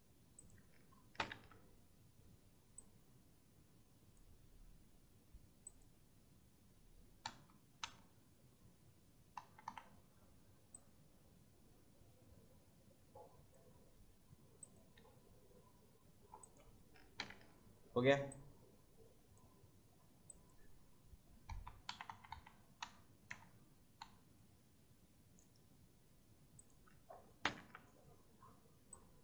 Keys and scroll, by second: 1.1 ctrl+v, 7.2 Right, 7.8 Down, 7.9 Left, 9.3 Left, 14.9 Right, 17.1 ctrl+v, 21.4 Right, 21.8 Left, 22.7 Right, 23.2 Left, 23.9 Right, 28.5 ctrl+v.